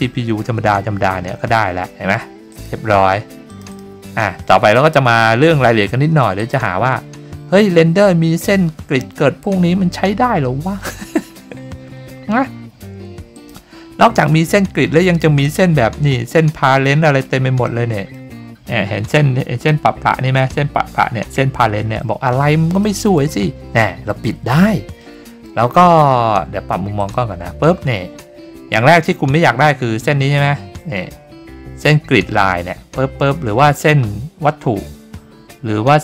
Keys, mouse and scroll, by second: 2.5 click, 3.5 click, 3.7 click, 4.7 click, 6.3 click, 13.3 click, 15.4 click, 17.1 scroll down 2, 17.6-18.1 middle drag, 18.5-18.9 scroll down 2, 18.9-19.6 scroll up 4, 19.1 middle click, 19.6-20.1 shift+middle drag, 22.1-22.5 scroll down 3, 22.8 middle click, 23.5 scroll down 3, 25.0-25.4 middle drag, 27.0 click, 28.2-28.6 scroll down 3, 28.6-29.3 scroll up 6, 28.8 middle click.